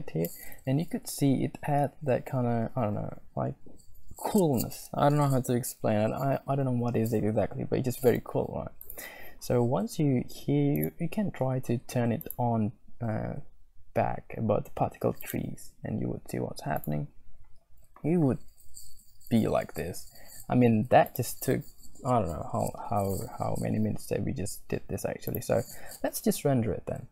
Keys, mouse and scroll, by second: 12.2-15.3 drag, 16.3 click, 17.0 click, 21.6 click, 25.9 z.